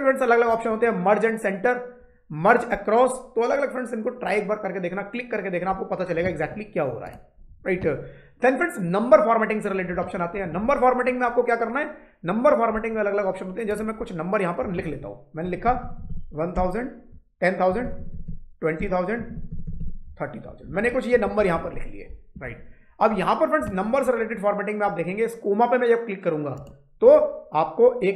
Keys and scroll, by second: 15.0-16.0 typing, 16.4 Return, 17.3-19.7 typing, 18.7 Return, 20.3 Up, 21.2 shift+Down.